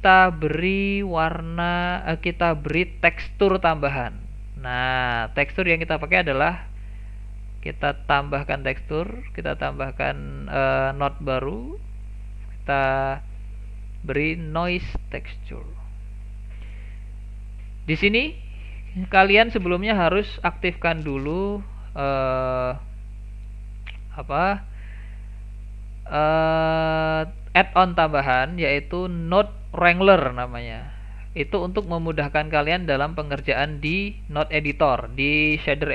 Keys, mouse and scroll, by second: 2.3 shift+a, 7.3 click, 8.2 shift+a, 16.7 click, 17.3 click, 22.4-25.4 drag.